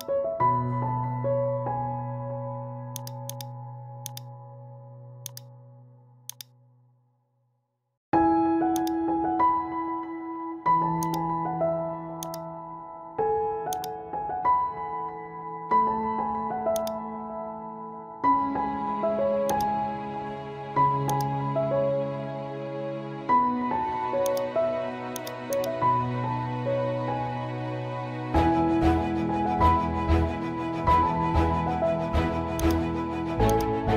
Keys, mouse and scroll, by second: 3.0 click, 6.9-8.1 typing, 9.3 click, 10.1 ctrl+z, 11.0 click, 16.8 click, 16.8 typing, 17.6 ctrl+z, 18.4-18.8 typing, 19.5 click, 20.6 ctrl+z, 21.1 click, 24.3 click, 24.3 typing, 26.0 scroll down 1, 26.5 scroll up 1, 27.2-27.7 typing, 29.6 scroll up 1, 30.8 scroll down 1, 31.1 typing, 32.6 click.